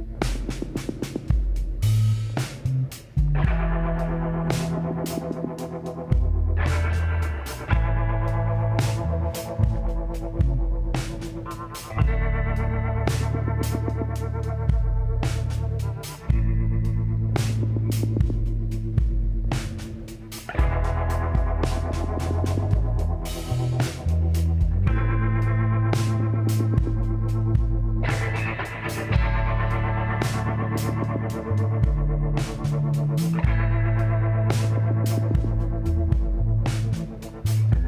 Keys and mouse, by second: 1.6 s, 3.9 z, 8.1 s, 10.5 s, 15.1 KP_7, 16.2 shift+d, 16.9 r, 19.8 r, 21.8 l, 22.9 shift+d, 23.6 r, 26.8-29.3 middle drag, 27.7 a, 31.5-36.1 middle drag, 36.7-37.8 middle drag.